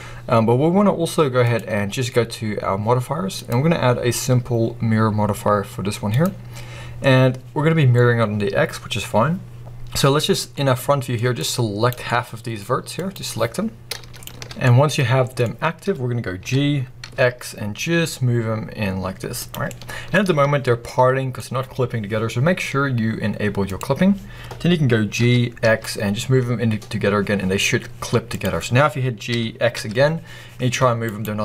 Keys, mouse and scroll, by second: 1.3-10.4 drag, 10.4 middle click, 11.2 click, 11.9 middle click, 12.8 click, 14.1 alt+shift+click, 14.5 middle click, 15.4-16.3 scroll up 2, 16.3 g, 19.4 click, 19.5 middle click, 20.1 scroll up 2, 20.7 middle click, 23.6 click, 25.1 g, 28.3 click, 29.2 g, 31.1 right click, 31.3 scroll down 1.